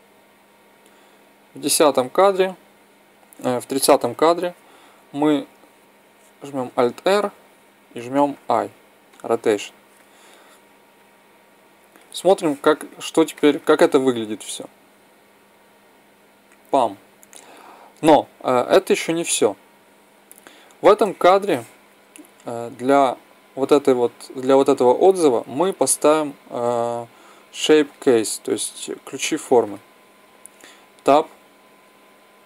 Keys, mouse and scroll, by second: 0.5 click, 3.9 Right, 6.6 alt+r, 8.2 i, 10.9-12.0 drag, 12.3-15.5 middle drag, 20.7 middle click, 31.0 Tab.